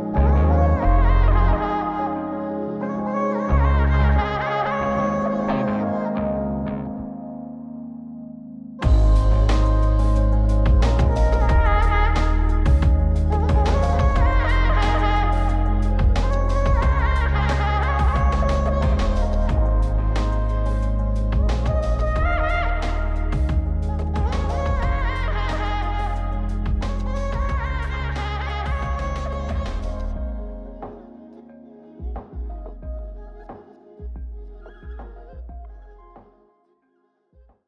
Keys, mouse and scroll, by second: 4.9 q, 7.0 g, 8.5 q, 10.0 g, 12.8-19.6 drag, 20.1 q, 22.2 g, 25.8 q, 32.5 q, 35.1 q.